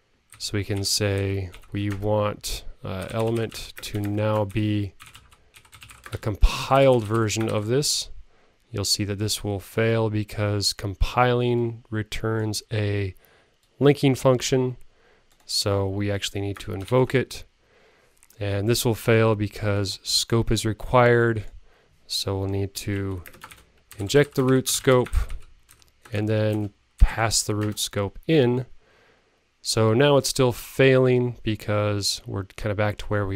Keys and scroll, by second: 2.6 super+Right.